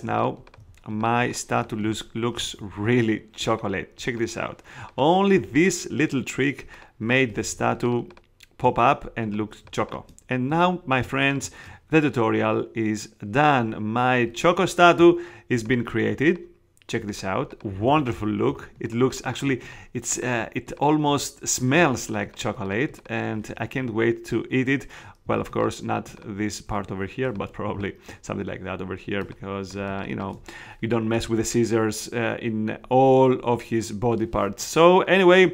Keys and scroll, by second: 7.4 space, 18.4 alt+space, 25.2 space.